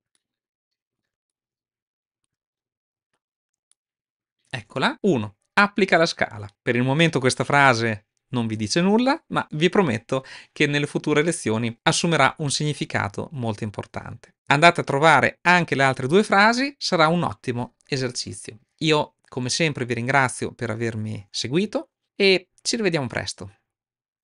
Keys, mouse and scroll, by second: 0.0-0.8 middle drag, 1.1-2.1 shift+middle drag, 3.5-4.5 shift+middle drag.